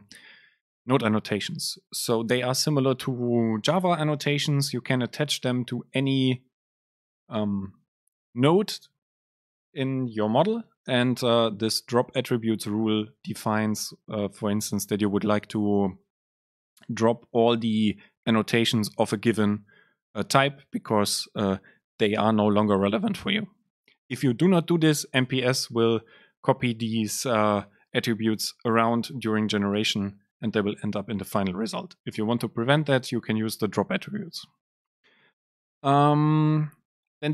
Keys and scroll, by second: 24.8 Down, 25.2 Up.